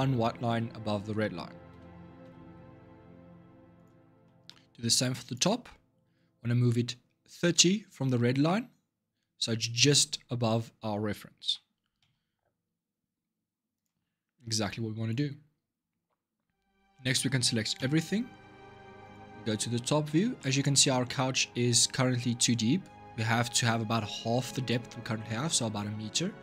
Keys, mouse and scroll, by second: 1.5 g, 4.0 shift+middle click, 4.7 click, 5.6 scroll up 2, 11.2 g, 17.5 a, 18.8 click, 19.3-20.1 scroll down 5, 20.1-23.3 shift+middle drag.